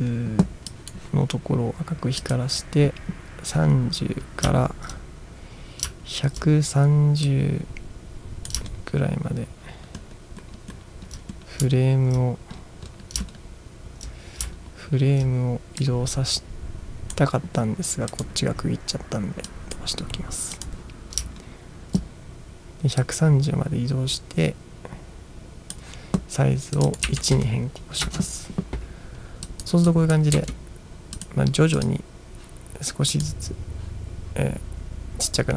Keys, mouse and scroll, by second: 0.8 click, 2.2 click, 5.3 ctrl+scroll down 1, 7.3-8.6 drag, 7.3 ctrl+scroll down 1, 8.8 ctrl+scroll down 1, 9.4-12.1 ctrl+scroll down 15, 12.6-14.2 scroll down 6, 14.6-15.2 ctrl+scroll down 3, 15.8-17.2 drag, 18.2 click, 19.5 click, 20.7 click, 21.5 ctrl+scroll down 2, 23.0-25.8 drag, 26.7 click, 27.1 1, 28.2 Return, 29.6 click, 30.1 click, 30.5 space, 31.3 click, 31.9 click, 33.2 click.